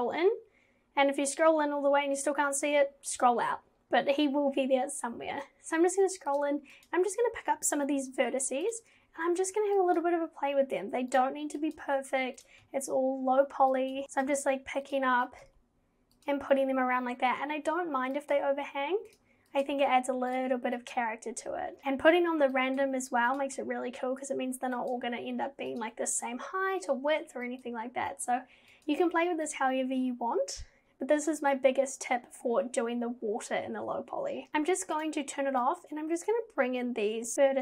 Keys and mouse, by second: 6.8 click, 8.0 g, 10.1 g, 11.7 click, 11.8 g, 13.8 click, 14.0 g, 14.2 click, 14.3 g, 15.3 click, 15.5 g, 18.3 click, 18.4 g, 19.6 click, 19.8 g, 20.9 click, 21.5 g, 22.7 click, 22.9 g, 24.9 click, 25.0 g, 27.6 click, 27.7 g, 28.2 click, 28.4 g, 28.9 click, 29.0 g, 35.0 click, 35.8 click, 37.3 g.